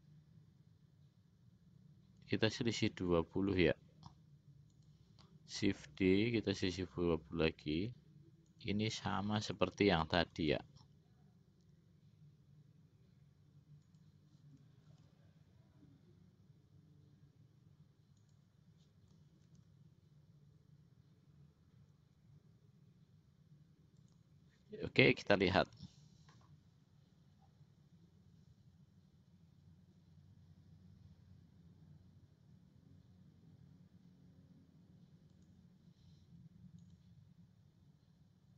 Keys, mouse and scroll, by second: 6.2 shift+d, 10.7 shift+d, 15.2 shift+d, 19.7 shift+d, 25.9 click, 35.5 click, 37.0 click.